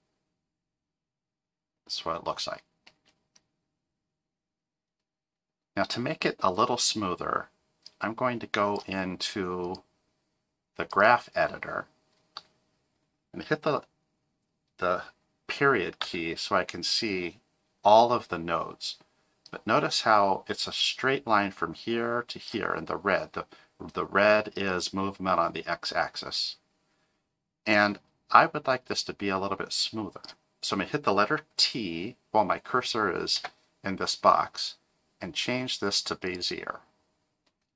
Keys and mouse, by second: 2.9 space, 8.0 click, 9.6-11.0 drag, 16.0 KP_Decimal, 19.5-22.5 drag, 24.5 click, 26.5-30.2 drag, 33.4 t.